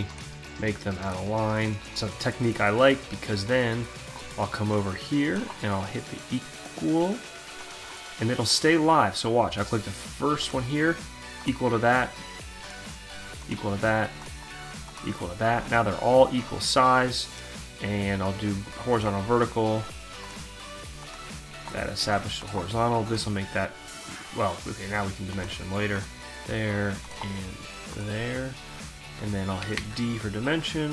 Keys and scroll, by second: 29.3 d.